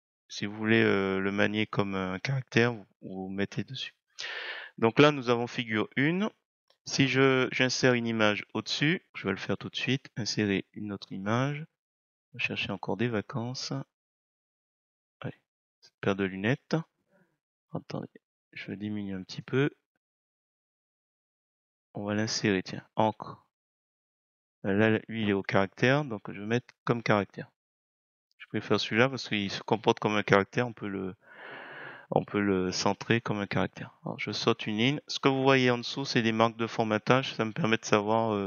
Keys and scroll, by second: 33.0 Return.